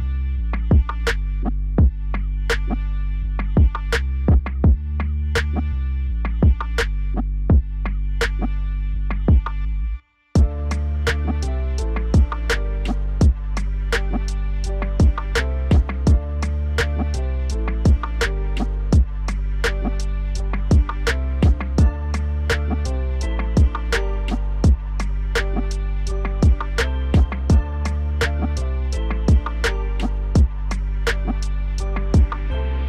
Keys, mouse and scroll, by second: 0.0 click, 1.4 Tab, 1.9 a, 2.9 e, 4.3 Tab, 5.3 click, 5.7-8.1 drag, 8.4-8.8 right drag, 8.8 click, 9.2 KP_1, 10.5 click, 10.7 click, 11.0 click, 11.5-12.0 scroll down 1, 12.6 click, 12.9 scroll down 3, 13.4 click, 13.8-14.3 middle drag, 14.3-14.7 scroll up 3, 14.7 ctrl+z, 14.9 ctrl+z, 16.5 shift+d, 18.0 Tab, 18.6 Delete, 18.9 click, 19.6 ctrl+z, 20.0 ctrl+z, 21.0 g, 22.7 click, 22.9 drag, 23.1-24.2 middle drag, 24.2 g, 24.8-25.2 middle drag, 25.2 click, 25.6 Delete, 26.1 KP_1, 26.5 scroll down 3, 26.7-27.8 middle drag, 27.8 click, 28.3 Tab, 29.4 scroll up 2, 29.6-30.1 scroll down 2, 30.1 e, 31.5 alt+s.